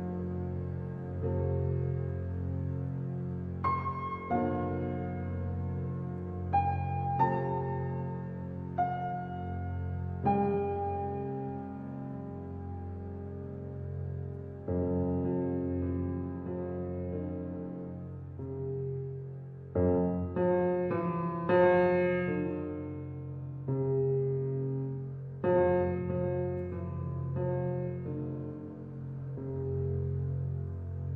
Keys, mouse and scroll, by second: 2.2 click, 2.9 Tab, 3.3-5.0 middle drag, 5.0-5.6 scroll down 1, 5.6-7.0 right drag, 7.0-9.3 middle drag, 9.3 alt+h, 9.9-12.6 middle drag, 12.6 click, 14.1-16.0 middle drag, 16.0 click, 16.7 click, 18.0-18.7 middle drag, 18.7-19.3 scroll down 3, 19.3 click, 19.9-22.7 right drag, 22.7-23.4 middle drag, 23.4-23.9 scroll up 4, 23.9-24.8 middle drag, 24.8-25.2 scroll down 2, 25.2-26.7 middle drag, 26.7-29.7 scroll down 1, 30.9 click.